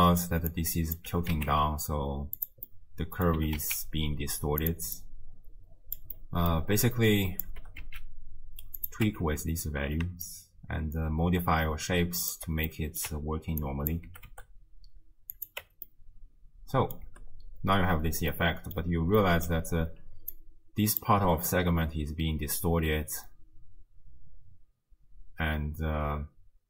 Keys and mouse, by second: 0.7 click, 1.1 g, 2.7 middle click, 3.4 g, 5.1 click, 6.2 click, 7.0 click, 7.6 g, 9.1 Tab, 10.3-12.3 shift+drag, 12.8 click, 13.1 Tab, 13.8 click, 14.1 g, 15.6 Tab, 16.0-17.0 drag, 17.1 space, 18.1 space, 18.4 click, 19.3 click, 19.6-21.3 d, 20.3 click, 22.7-26.6 d.